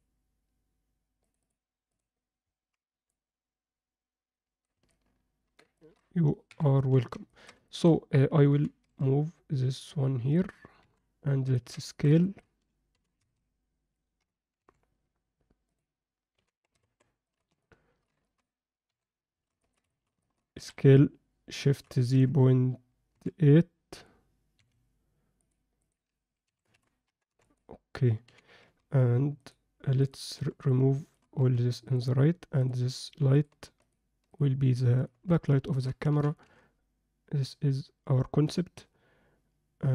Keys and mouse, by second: 1.2 click, 1.9 click, 3.1-4.7 drag, 4.9-5.6 alt+middle drag, 5.7 ctrl+middle click, 6.5 KP_7, 7.3 ctrl+middle click, 7.7 shift+middle click, 8.5 g, 10.8 KP_1, 11.5 ctrl+middle click, 11.9-12.4 alt+shift+middle drag, 12.9 g, 16.3 g, 17.6-18.1 alt+middle drag, 18.2 ctrl+middle click, 18.9 KP_7, 19.6 ctrl+alt+middle click, 19.9 alt+shift+middle click, 20.2 ctrl+alt+middle click, 20.5 s, 25.5 click, 26.5 s, 28.3 g, 30.0 click, 30.6 shift+drag, 31.0 shift+click, 31.4 x, 34.3 shift+drag, 34.9 shift+drag, 35.7 ctrl+middle click, 36.1 g.